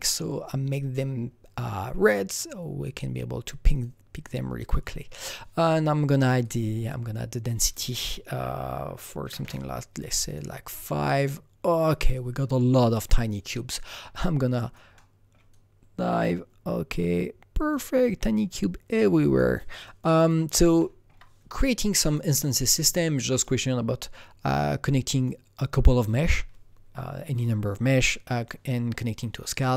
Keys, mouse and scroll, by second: 3.7 click, 3.7 click, 6.4 click, 6.4 click, 7.7 double click, 9.2 KP_5, 9.4 Return, 10.2 click, 13.9 KP_Enter, 13.9 click, 13.9 KP_5, 14.2-19.8 alt+right drag, 14.9-20.1 alt+middle drag, 20.1 alt+double right click, 20.4 alt+right click, 22.0 click, 23.4-27.6 drag, 28.0-29.7 drag.